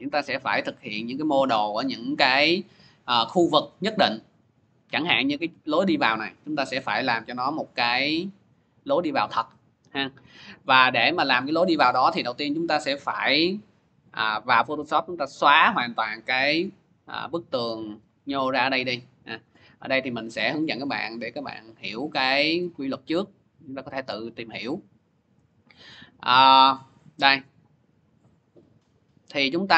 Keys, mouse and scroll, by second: 20.0 click, 21.9 click, 22.3 middle click, 22.4 middle click, 22.6 middle click, 23.4 middle click, 26.8 click, 27.0 click, 27.0 scroll, 28.3 click, 28.6 click, 29.5 scroll.